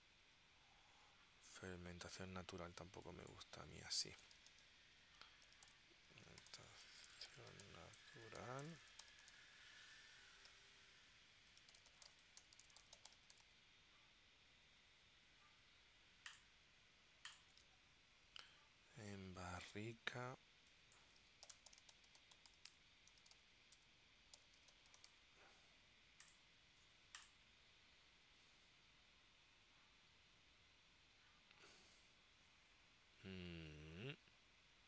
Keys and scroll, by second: 4.1-14.1 typing, 17.7 super+Tab, 19.7 super+Tab, 21.1-25.7 typing.